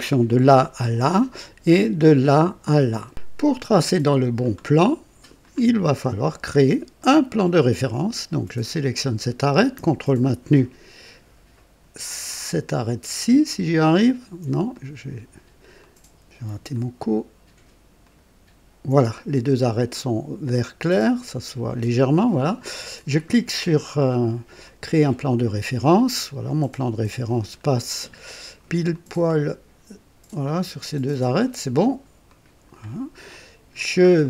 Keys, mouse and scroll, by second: 3.1 click, 3.4-4.6 drag, 4.7 click, 6.5-6.8 scroll up 1, 7.0 right click, 8.7 click, 13.5 ctrl+click, 14.7-15.4 drag, 15.8-16.6 drag, 16.7 ctrl+click, 18.0 ctrl+click, 19.0-22.3 ctrl+drag, 24.6 click, 25.9-27.7 drag, 27.7 right click, 27.9 middle click, 28.3 right click, 28.9-31.6 drag, 32.3 click, 33.3 click, 34.0-34.2 scroll down 1.